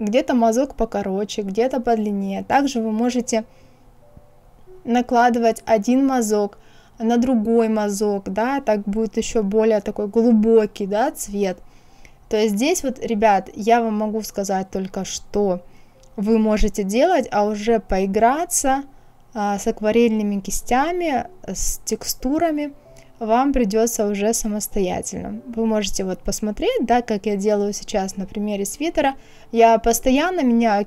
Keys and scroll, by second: 4.7 KP_0, 5.1 KP_Decimal, 5.4 KP_7, 5.7 Return, 16.5 ctrl+z.